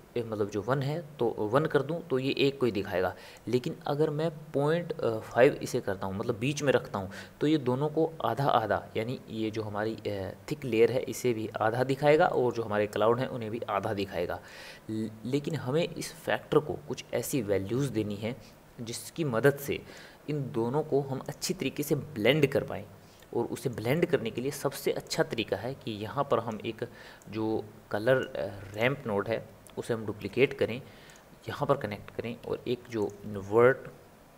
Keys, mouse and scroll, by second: 3.3-6.4 drag, 12.3-15.5 middle drag, 15.5 click, 23.2-25.2 middle drag, 25.2 click, 27.4 click, 28.9 click, 30.2 shift+d, 32.6 shift+a.